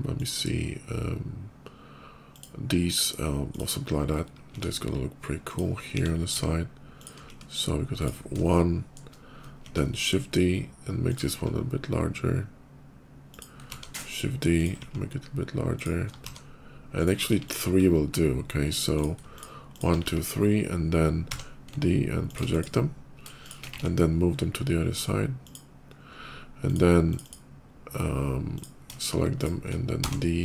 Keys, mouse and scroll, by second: 0.0 click, 5.3 click, 5.7 g, 6.3 ctrl+g, 6.8 click, 7.1 s, 7.8 click, 8.2 shift+middle click, 9.4 shift+d, 10.0 ctrl+shift+d, 10.9 click, 11.1 s, 13.1 click, 13.5 shift+d, 14.4 click, 14.6 s, 15.6 click, 16.0 shift+d, 16.8 click, 17.1 x, 17.2 click, 18.8 click, 19.1 shift+click, 19.6 shift+click, 19.8 x, 21.0 d, 21.6 alt+d, 23.5 alt+x, 25.3 click, 25.7 middle click, 25.7 scroll up 1, 26.5 click, 26.9 click, 27.1 click, 28.3 click, 28.8 shift+click, 29.2 shift+click, 29.8 d.